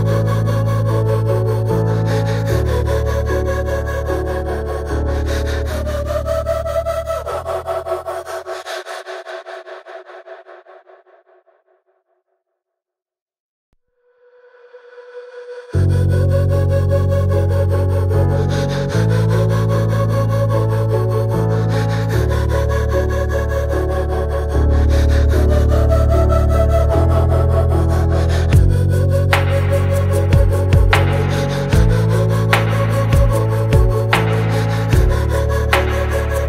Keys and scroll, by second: 8.4 Delete, 9.7 ctrl+v.